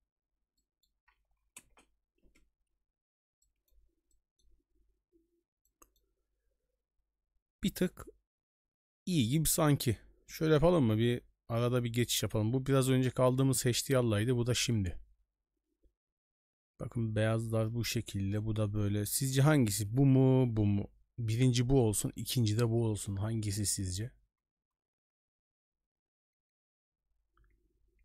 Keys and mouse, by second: 0.6 middle click, 1.7 ctrl+space, 3.4 middle click, 4.1 middle click, 5.6 middle click, 11.5 j, 13.5 j, 14.5 j, 15.9 j, 19.2 j, 20.5 j, 25.5 j, 26.6 j, 27.5 j, 27.6 j.